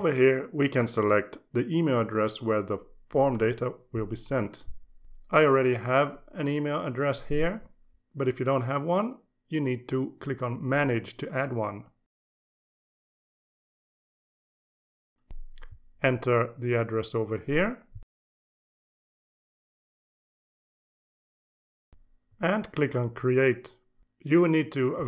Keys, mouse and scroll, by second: 1.3 click, 4.2 click, 11.9 click, 15.8 click, 18.2-23.6 typing.